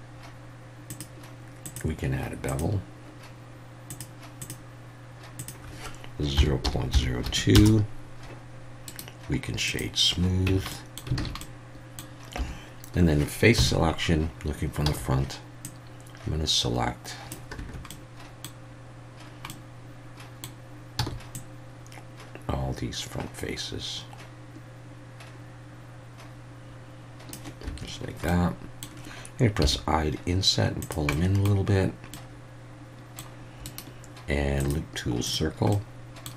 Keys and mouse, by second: 1.0 click, 1.7-2.6 drag, 3.9 click, 4.4 click, 5.4-8.2 drag, 9.0-9.8 right drag, 10.5 Tab, 10.7 middle click, 11.2 alt+a, 11.4-12.0 middle drag, 12.4 3, 13.6 KP_1, 14.8 c, 17.6 Escape, 17.9-18.4 drag, 19.5-20.4 drag, 21.0 c, 27.7 Escape, 28.3 middle click, 29.6 i, 30.8 click, 31.1 middle click, 32.1-33.2 middle drag, 33.7-35.3 drag, 35.3-35.7 right drag, 35.8-36.3 middle drag.